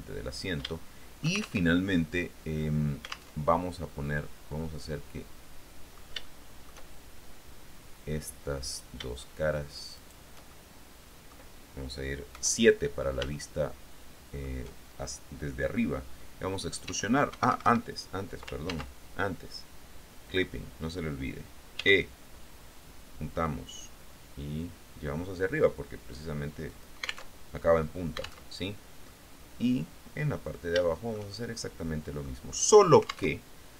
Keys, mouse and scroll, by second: 0.4-0.9 scroll up 2, 0.9 shift+middle click, 1.8 alt+shift+Tab, 3.5 alt+Tab, 4.9-7.1 middle drag, 8.8 right click, 10.1 shift+right click, 10.7-11.7 shift+middle drag, 12.5 KP_7, 13.5-14.8 shift+middle drag, 17.0 e, 17.5 Escape, 18.9 ctrl+z, 20.4 click, 21.9 e, 26.9 click, 27.5 alt+Tab, 28.7 alt+Tab, 29.3-30.8 drag, 30.9-32.6 shift+drag, 32.6-33.5 scroll up 2, 33.5 alt+Tab.